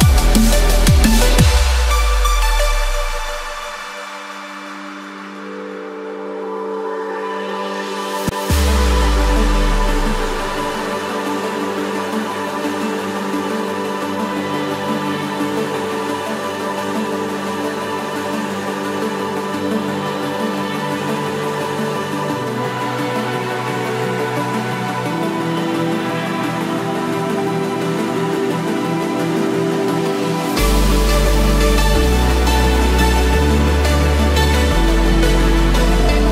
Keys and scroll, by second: 5.7 ctrl+z, 14.8 Escape, 22.3 ctrl+z, 27.1 Return, 27.6 Escape, 29.7 ctrl+=, 33.8 Escape.